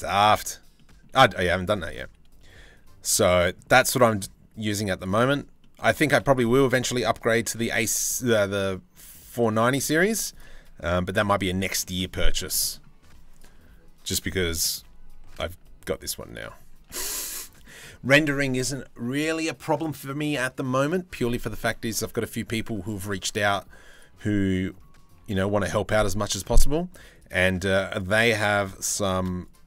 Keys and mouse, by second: 0.4 middle click, 1.2 1, 2.7 c, 5.6 z, 6.1 middle click, 7.0 e, 9.2 click, 9.8 2, 10.8 f, 11.4 click, 12.1 click, 12.9 click, 14.2 g, 16.4 Tab, 21.6 Tab, 21.8 click, 23.9 click, 24.8 g, 28.7 ctrl+z, 29.1 shift+click.